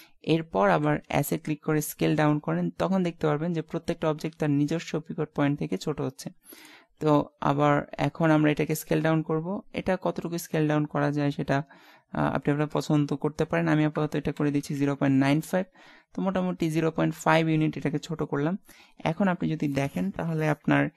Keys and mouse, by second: 0.8 s, 8.4 s, 20.0-20.9 middle drag.